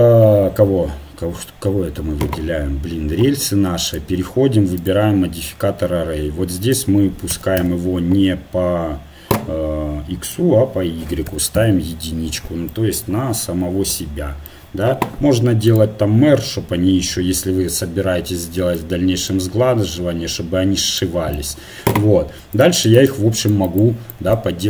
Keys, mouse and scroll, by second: 3.9-5.8 drag, 6.7-12.7 drag, 12.7-15.7 middle drag, 15.7 click, 17.5 right click, 18.6-21.3 middle drag, 22.5-24.6 drag, 22.5 middle click.